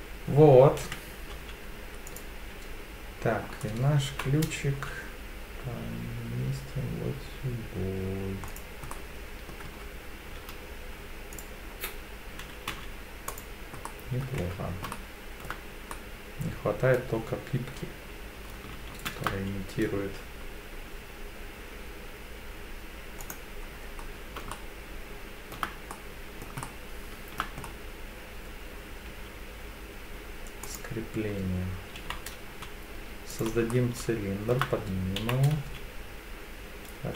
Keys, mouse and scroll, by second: 0.8 KP_3, 1.3 z, 4.1 g, 4.7 z, 8.5 click, 8.9 middle click, 9.7 Tab, 10.4 z, 12.7 z, 13.9 middle click, 14.4 Tab, 14.9-15.5 shift+middle drag, 15.9-17.0 middle drag, 18.9 shift+a, 23.7-24.4 scroll down 5, 24.5-25.5 shift+middle drag, 25.9-26.4 middle drag, 26.6 shift+scroll up 1, 26.6-27.4 shift+middle drag, 27.6-29.0 scroll up 2, 29.1 s, 30.6 click, 32.0 g, 32.5 z, 33.3 click, 33.7 shift+middle click, 35.2 g, 35.6 z.